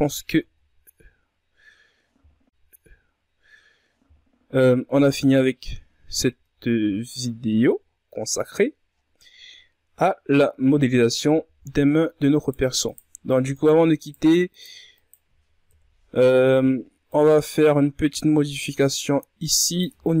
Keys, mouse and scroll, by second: 0.1 right click, 1.0 Tab, 1.2-2.0 scroll down 6, 3.6-4.0 shift+scroll down 4, 4.1-5.2 scroll up 8, 5.2 Tab, 5.4-6.9 scroll down 7, 6.9-7.8 ctrl+scroll up 10, 7.8-8.6 scroll down 10, 9.3-10.3 scroll up 10, 10.3-10.6 ctrl+scroll down 3, 10.6 middle click, 11.3 right click, 11.7 shift+right click, 12.4 shift+right click, 12.9 shift+right click, 13.4 shift+right click, 13.8 shift+right click, 14.6 KP_1, 16.0-18.8 drag, 18.8 Tab, 19.1-20.2 scroll down 10.